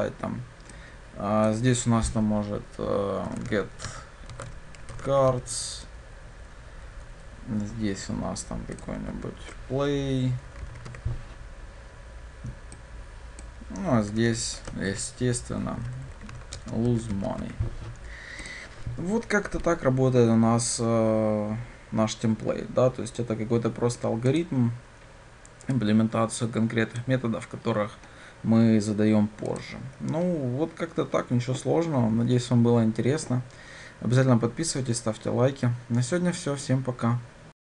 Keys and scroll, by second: 9.2 ctrl+w.